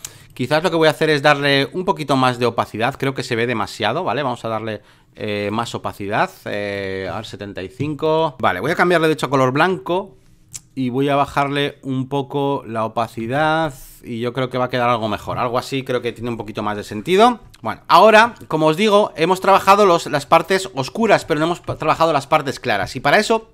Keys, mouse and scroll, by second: 0.0-2.3 drag, 2.3 v, 3.6-5.5 drag, 6.5 click, 7.0 ctrl+s, 8.0 click, 9.1 ctrl+i, 10.5-13.0 drag, 13.2 ctrl+s, 13.6-14.9 drag, 14.9 v, 17.1 alt+middle click, 18.2 space, 18.4-19.4 drag, 20.2 space, 20.4 click.